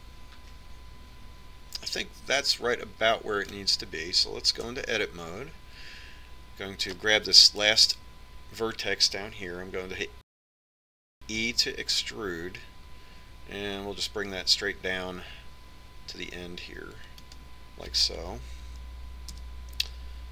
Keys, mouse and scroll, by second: 6.7 Tab, 8.8-12.4 right drag, 12.4 e, 19.6 KP_3.